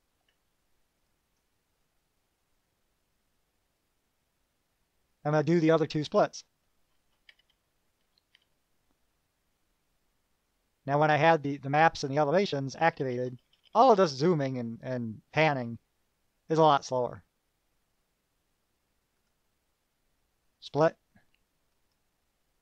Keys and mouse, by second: 1.3 click, 5.4-6.7 drag, 9.6-11.6 drag, 12.9 KP_Add, 19.5 click, 21.9 click.